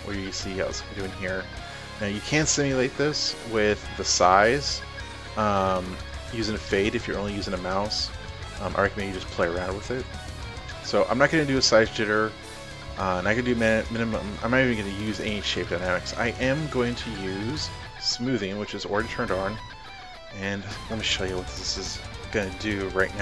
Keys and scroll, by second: 22.5 ctrl+alt+z.